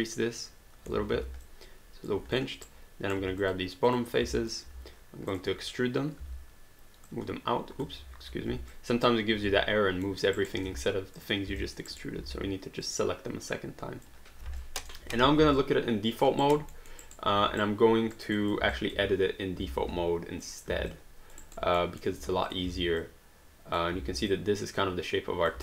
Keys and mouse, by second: 1.1 alt+d, 1.5 alt+click, 2.4 click, 2.6 right click, 3.2 q, 3.4 click, 4.4 alt+click, 5.3 click, 6.2 w, 7.1 click, 8.0 ctrl+z, 8.7 alt+click, 10.1 alt+middle click, 10.4 alt+right click, 10.7 q, 11.2 click, 11.6 alt+click, 11.9 alt+right click, 12.9 click, 14.6 alt+click, 15.5 alt+click, 16.4 alt+right click, 16.7 alt+middle click, 17.1 alt+right click, 17.6 right click, 18.3 click, 18.8 alt+click, 19.8 r, 20.5 click, 20.9 alt+click, 21.5 alt+right click, 21.8 alt+middle click, 22.5 click, 22.7 w, 23.0 click, 24.2 click.